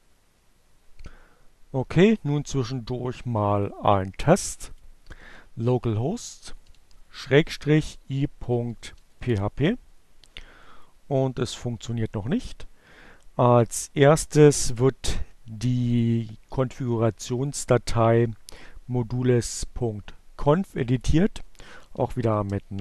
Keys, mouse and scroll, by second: 3.6 click, 5.2 click, 6.0 shift+7, 7.7-9.7 typing, 9.7 Return, 12.3 click, 15.4 click, 17.6 click, 19.7 click, 19.8-21.0 typing, 21.8 click.